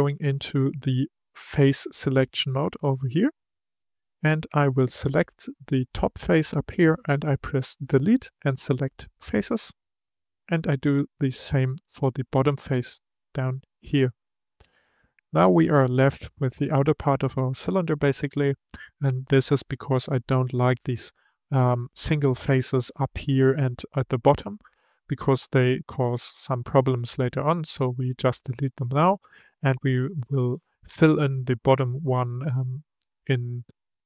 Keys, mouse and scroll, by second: 0.1 3, 3.4 click, 4.4-7.5 middle drag, 7.8 Delete, 10.2-11.7 middle drag, 11.7 click, 13.0 Delete, 15.0-18.2 middle drag, 19.6-22.6 middle drag, 30.6-33.7 middle drag.